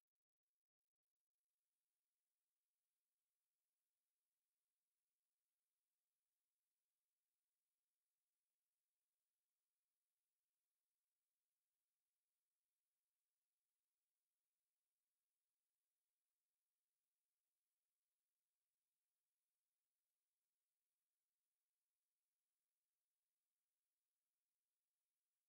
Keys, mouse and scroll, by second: 18.7 click, 23.6 g.